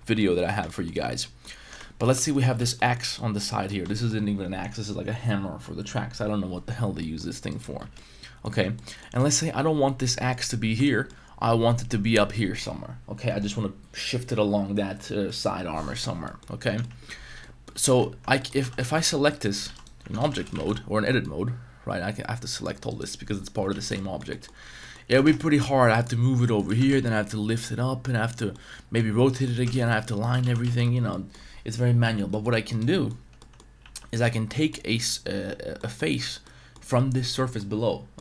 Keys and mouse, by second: 0.1 1, 0.2 middle drag, 0.6 shift+middle drag, 1.1-1.4 middle drag, 1.6 Tab, 1.8 shift+middle drag, 2.2 middle drag, 2.4 a, 2.6 a, 2.7 middle click, 3.1 middle click, 3.5 middle click, 3.9 shift+middle click, 7.0 middle drag, 7.5 right click, 7.9 Tab, 7.9 middle click, 8.6 Tab, 8.7 middle click, 9.2 middle click, 10.1 middle click, 10.8 shift+middle drag, 16.2 middle click, 16.6 Tab, 16.7-20.5 typing, 16.8 middle drag, 17.4 middle drag, 18.1 Tab, 18.4 middle click, 19.7 right click, 20.1 Tab, 22.0 c, 22.9 right click, 23.7 z, 23.9 shift+middle click, 24.3 middle click, 24.8 middle click, 25.0 g, 25.2 shift+z, 26.6 click, 26.7 g, 26.9 z, 28.3 click, 28.5 middle click, 29.2 middle click, 29.5 g, 29.7 z, 30.2 right click, 30.5 ctrl+z, 30.7 ctrl+z, 31.1 middle click, 32.3 middle click, 32.6 Tab, 32.7 right click, 32.9 middle drag, 33.2 Tab, 33.4 middle click, 33.8 3, 34.1 right click, 34.3-34.7 middle drag, 35.7 middle click, 36.4 middle click, 37.5 middle click.